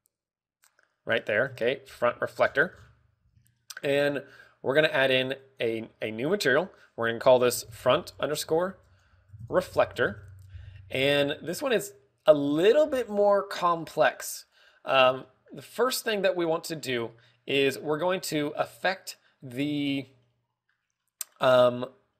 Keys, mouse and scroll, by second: 1.1 right click, 2.4 KP_0, 3.0 z, 3.3 scroll down 2, 4.0 scroll down 9, 4.1 z, 4.3 shift+middle click, 6.3 click, 6.3 z, 7.2 click, 15.4 click, 15.8-17.0 scroll down 5, 16.1 middle click.